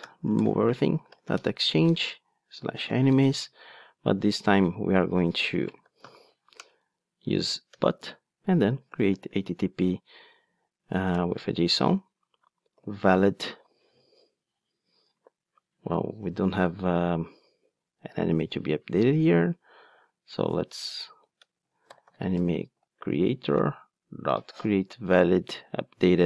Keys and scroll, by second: 1.4 Return, 6.7 Return, 11.1 Return, 18.9 Tab, 23.2 Tab, 23.3 Return.